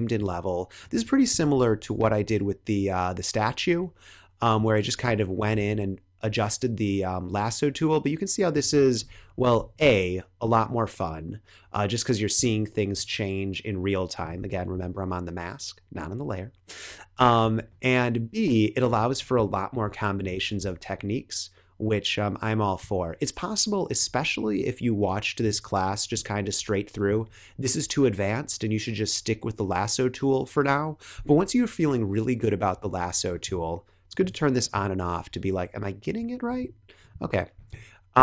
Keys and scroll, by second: 1.4 super+z, 1.9 x, 5.5 x, 8.9 [, 9.7 x, 17.9 x, 19.1 space, 20.5 x, 25.9 space.